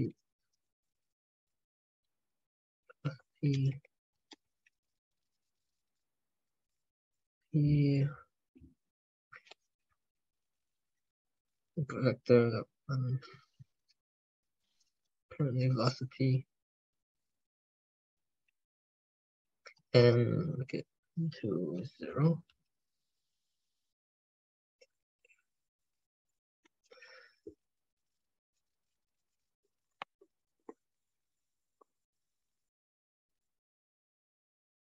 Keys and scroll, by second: 0.3 ctrl+BackSpace, 2.2 ctrl+BackSpace, 5.6 alt+Tab, 9.1 alt+Tab, 13.0 ctrl+Left, 13.2 ctrl+Left, 13.5 alt+Tab, 22.4 ctrl+alt+Tab, 24.8 alt+Tab, 26.4 ctrl+BackSpace.